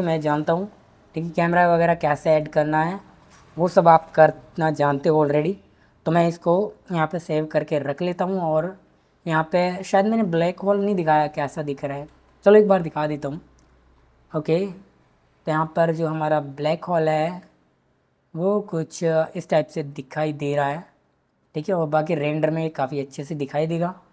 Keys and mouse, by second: 1.6 click, 6.3 ctrl+s, 14.9 click.